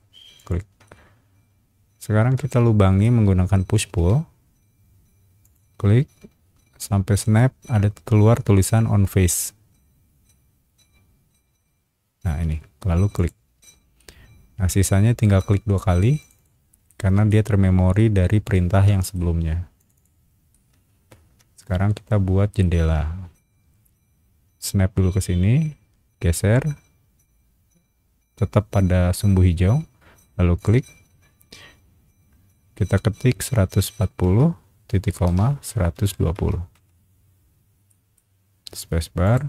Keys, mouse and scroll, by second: 0.4 shift+click, 0.8-3.0 middle drag, 3.9 p, 5.4 click, 8.2-8.6 scroll up 2, 13.1 click, 14.0 shift+middle click, 16.2 click, 16.3 click, 16.9 shift+middle click, 17.6 scroll down 1, 17.9-19.1 shift+middle drag, 19.8 shift+click, 19.9 shift+click, 20.5-22.6 shift+middle drag, 23.0 scroll up 1, 23.6 r, 26.3 scroll up 1, 30.5 click, 33.8 KP_1, 34.0 KP_4, 34.2 KP_0, 35.3 ;, 35.9 KP_1, 36.1 KP_2, 36.3 KP_0, 36.7 KP_Enter, 37.9 middle click, 38.8 space, 39.2 click.